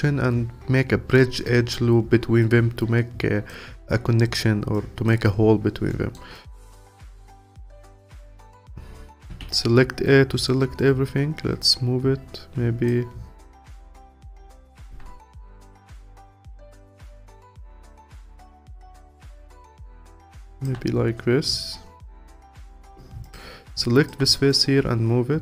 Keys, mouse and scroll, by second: 4.7-5.9 alt+drag, 5.9 alt+middle click, 6.3-7.5 alt+drag, 8.5 ctrl+z, 9.3 a, 10.8 click, 13.6 click, 15.2 alt+click, 16.2-17.1 scroll down 6, 17.1-19.7 scroll up 8, 19.7-21.0 alt+drag, 21.0-21.4 scroll down 4, 21.4-22.4 scroll up 2, 22.4 alt+click, 23.8 alt+click.